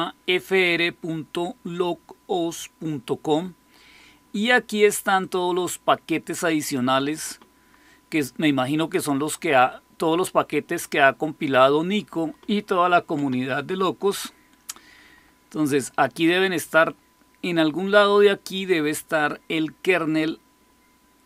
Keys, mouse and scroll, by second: 15.5 scroll down 1, 17.4-21.2 scroll down 1.